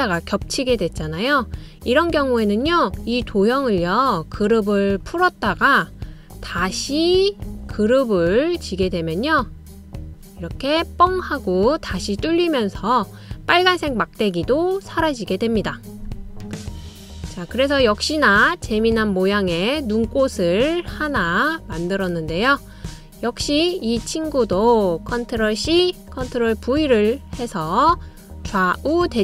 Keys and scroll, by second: 27.2 super+c, 27.5 super+v.